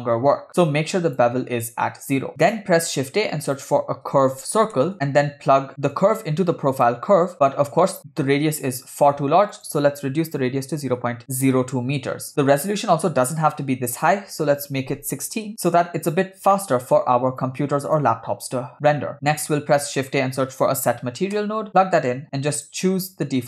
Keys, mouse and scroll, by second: 0.6 click, 2.3 middle click, 2.3 scroll down 3, 2.6 shift+a, 6.0 drag, 7.3 middle click, 7.4-8.0 scroll up 3, 9.5-11.5 drag, 14.0-15.4 drag, 16.2-16.5 scroll down 3, 16.6 middle click, 17.4 click, 19.1 click, 20.0 shift+a, 22.6-23.4 drag.